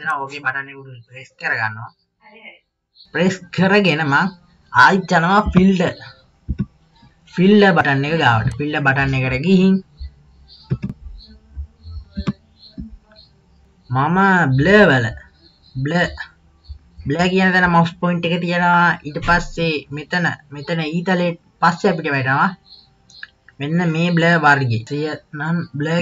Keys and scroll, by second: 5.4 KP_1, 6.5 KP_3, 13.1 KP_2.